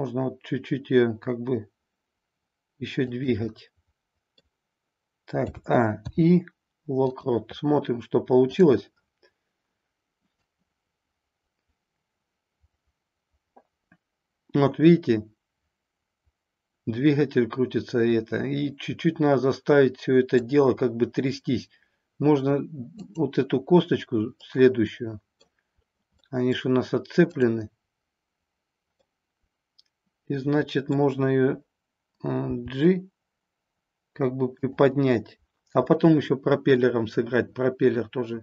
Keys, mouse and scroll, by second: 3.1 click, 3.5 middle click, 5.5 a, 6.0 i, 10.4-20.5 drag, 23.0 click, 24.4-25.5 middle drag, 26.2-26.8 middle drag, 27.3-28.5 drag, 29.0-30.9 middle drag, 32.4 g, 34.8 drag, 35.9 middle click, 36.8 scroll down 1.